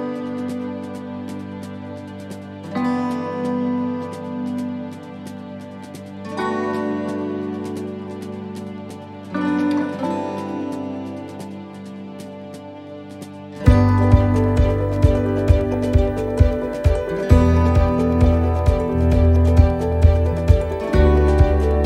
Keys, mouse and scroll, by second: 0.6 scroll down 1, 1.4 middle click, 2.2-2.6 scroll down 2, 2.6 middle click, 4.9 middle click, 7.2 middle click, 8.0-8.5 scroll up 2, 8.5 middle click, 9.1-10.0 scroll down 1, 10.0 middle click, 11.0 right click, 11.6 middle click, 13.1 click, 14.1 right click, 14.6 shift+right click, 16.0 shift+right click, 16.3 shift+middle click, 17.4 right click, 18.2 shift+right click, 18.7 shift+right click, 19.3 shift+right click, 20.5 shift+right click.